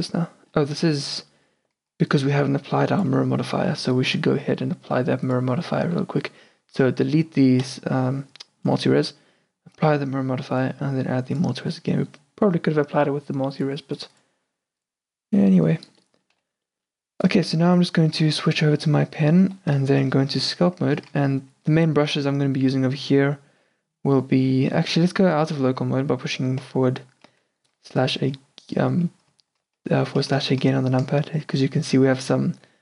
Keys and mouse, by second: 1.0-2.0 middle drag, 2.0 click, 2.0 d, 3.2 d, 4.2 n, 5.6-6.7 drag, 5.9 n, 7.7-12.7 drag, 15.5-19.4 middle drag, 16.4 n, 19.4 Tab, 20.0-22.6 middle drag, 22.7 middle click, 26.7 KP_Divide.